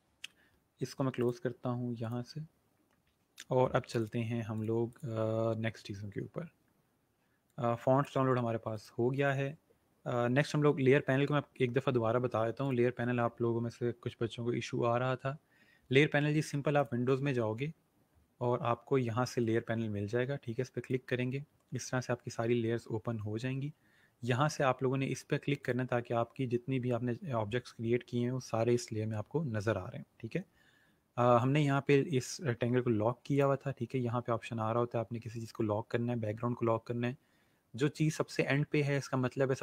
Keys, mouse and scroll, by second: 1.2 click, 5.9 scroll up 1, 7.5 click, 12.6 click, 16.8 click, 20.8 click, 25.6 click, 33.3 click.